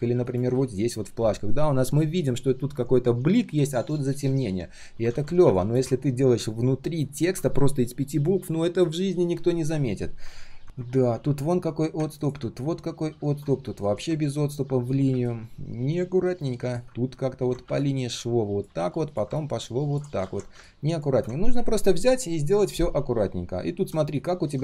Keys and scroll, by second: 0.6 ctrl+alt+v, 0.7 ctrl+alt+v, 5.1 ctrl+z, 18.7 ctrl+z, 20.2 ctrl+z.